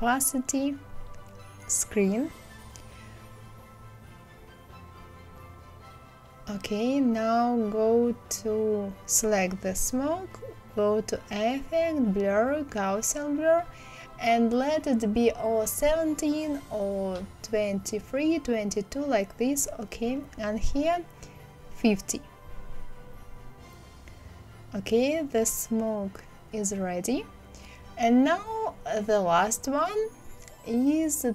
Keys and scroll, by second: 21.3 KP_5, 21.5 KP_0, 21.7 Return.